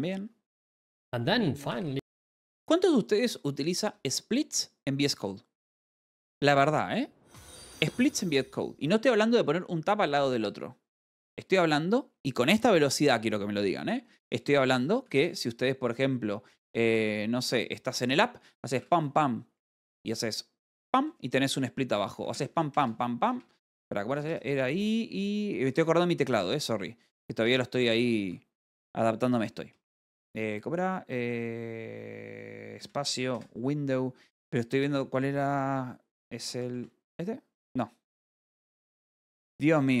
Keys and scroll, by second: 14.6-16.2 typing, 18.6 BackSpace, 18.6 p, 19.6 Return, 21.3 =, 22.7 space, 26.7 Escape, 30.2 \, 33.3 space, 34.2 w, 37.3 \, 39.2 Escape, 39.6 space.